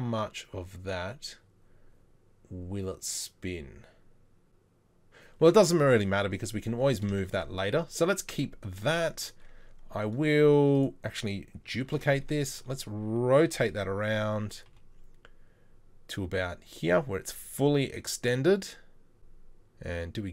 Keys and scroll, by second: 6.7 Tab, 11.9 shift+d, 12.6 shift+d, 12.6 e, 13.7 r, 14.7 g, 19.2 r, 19.2 g.